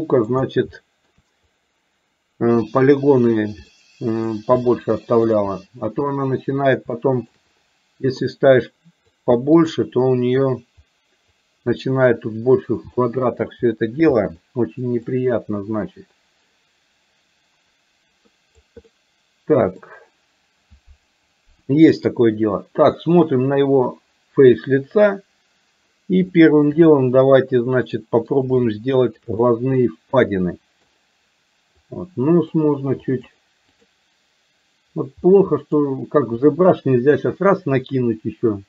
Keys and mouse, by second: 0.8 shift+middle click, 3.7 middle click, 4.7 shift+middle click, 6.9 shift+middle click, 8.3 click, 9.6 click, 13.1 shift+middle click, 14.2 middle click, 15.2-18.7 drag, 18.9-19.9 middle drag, 26.3 shift+middle click, 27.3-28.3 middle drag, 28.7 shift+middle click, 29.4-30.9 middle drag, 31.9 click, 33.1 click, 33.8 click, 35.3 middle click.